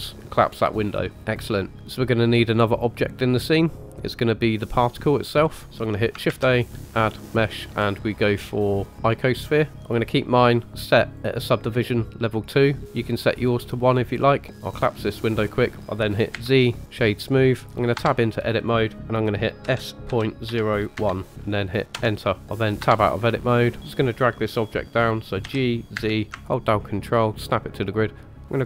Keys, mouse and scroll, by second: 1.7 click, 1.7 middle click, 1.7 scroll up 5, 6.2 shift+a, 11.1 click, 14.7 click, 16.3 z, 17.9 Tab, 19.6 s, 22.8 Tab, 23.4-23.8 shift+middle drag, 23.8-25.4 scroll down 2, 25.4 g.